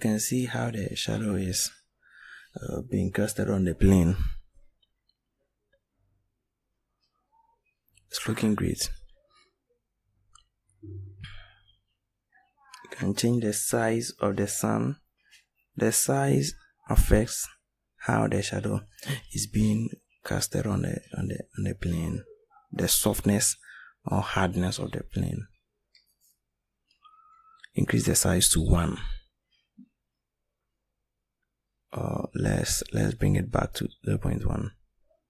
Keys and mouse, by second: 6.7 right click, 17.9-21.1 middle drag, 21.1 right click.